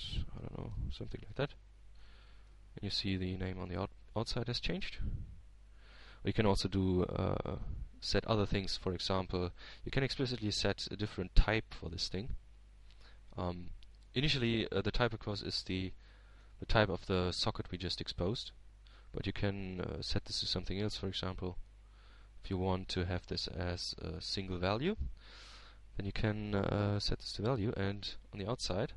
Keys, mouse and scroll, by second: 0.9-3.2 typing, 3.5 shift+Return, 5.4 shift+middle click, 6.0 shift+Tab, 7.2-8.8 middle drag, 9.7 Tab, 10.1-11.9 middle drag, 13.6 click, 17.6-19.2 drag, 18.1-19.2 right drag, 19.7 middle click, 20.4-20.9 scroll down 1, 20.9-23.0 middle drag, 23.0 click, 26.4 click, 27.6-28.8 drag.